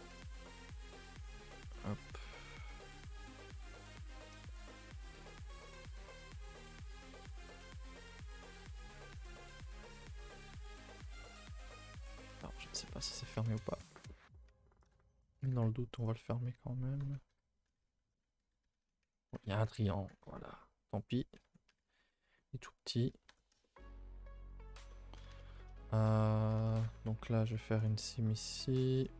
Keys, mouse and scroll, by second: 0.5 s, 1.9 middle click, 2.3 e, 3.9-5.4 middle drag, 5.4-5.7 scroll down 1, 5.7 middle click, 6.6 alt+click, 6.7 s, 8.5 s, 9.6 alt+click, 9.9 shift+middle click, 10.4 alt+click, 10.7 shift+middle click, 11.1 scroll up 1, 11.4 g, 12.9 shift+middle click, 13.4-14.9 scroll up 1, 14.9 click, 15.2 shift+click, 15.5-19.9 typing, 16.1 alt+Left, 18.2 alt+Left, 19.0 Tab, 19.4 Tab, 20.0-21.0 scroll down 1, 21.1 click, 21.4 Tab, 21.7 a, 21.9 a, 21.9-22.3 scroll down 4, 22.3 ctrl+s, 22.4-23.1 middle drag, 23.1 scroll up 2, 23.3 Tab, 23.6 shift+middle click, 23.9-24.6 scroll down 2, 24.6 click, 24.9 middle click, 25.2 a, 25.3 a, 25.4 middle click, 25.6-26.2 scroll up 3, 25.9 shift+middle click, 26.2 middle click, 26.4 a, 26.6 a, 26.7 middle click, 26.8 2, 27.5 alt+click, 29.1 right click.